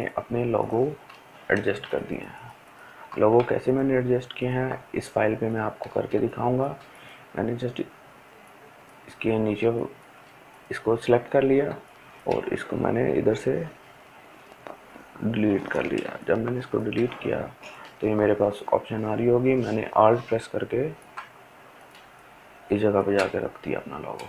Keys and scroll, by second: 14.9 Delete, 16.2 Delete.